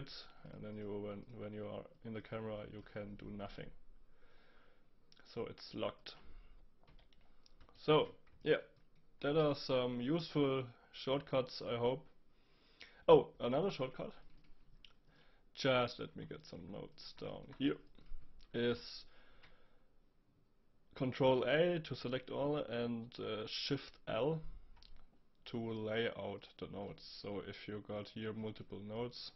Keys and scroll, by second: 6.9 Delete, 19.3 ctrl+a, 24.1 shift+l.